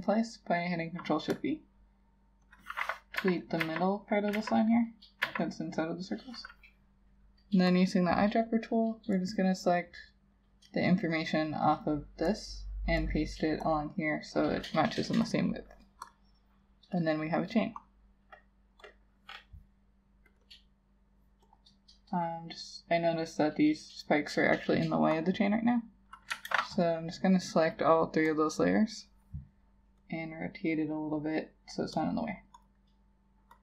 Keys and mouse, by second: 3.2 Delete, 3.7 Delete, 4.4 Delete, 5.3 Delete, 20.5 double click, 26.5 ctrl+a, 32.7 double click.